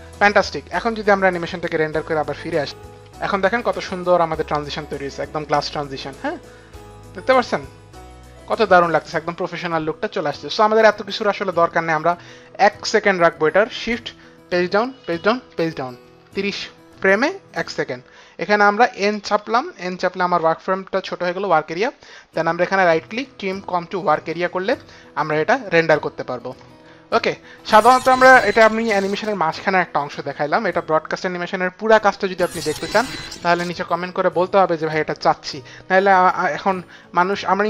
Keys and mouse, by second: 1.3 click, 3.4 F9, 5.4 F9, 5.4 space, 6.0 click, 10.8 click, 15.1 shift+Page_Down, 15.6 shift+Page_Down, 16.7 shift+Page_Down, 20.2 n, 23.1 right click, 23.9 click, 25.1 click, 25.1 right click, 27.7 click.